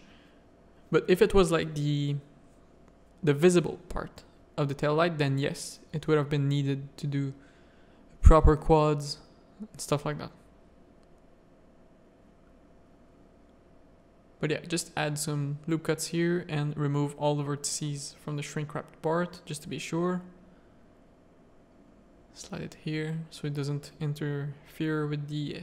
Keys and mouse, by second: 0.4 1, 1.5 middle click, 2.8 click, 3.9 a, 4.6 click, 5.0 z, 5.6 z, 6.8 Tab, 6.8 middle click, 7.7 Tab, 8.1 1, 8.8 z, 9.1 a, 9.4 middle click, 9.7 z, 10.3 ctrl+r, 13.5 g, 15.3 click, 16.9 g, 19.7 g, 22.8 3, 23.4 alt+click, 23.9 z.